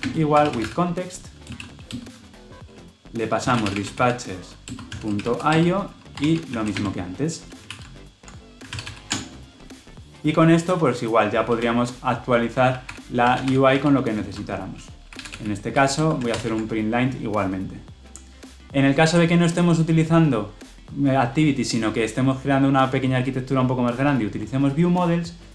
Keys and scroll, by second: 1.8 Return, 7.5 ctrl+v, 8.6 ctrl+alt+l, 12.7 ctrl+alt+o, 15.9 Return, 16.2 ctrl+alt+l, 16.3 ctrl+alt+o.